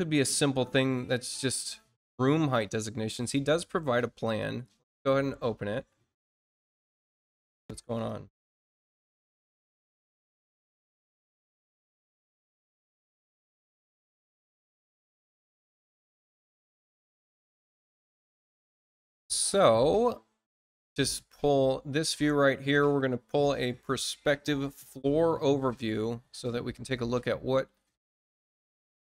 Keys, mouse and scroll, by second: 1.4-1.9 scroll down 2, 2.1 scroll up 2, 3.1 click, 6.4 click, 7.8 click, 13.1 click, 19.0 click, 21.0 click.